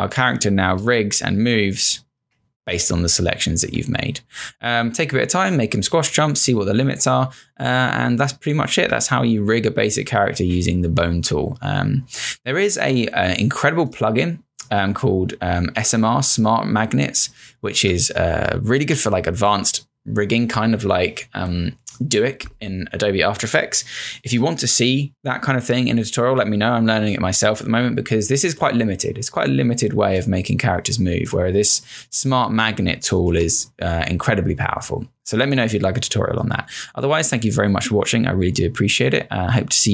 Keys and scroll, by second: 0.8 Return, 5.5 Return, 8.8 Return, 12.0 Return, 18.3 space, 33.3 z.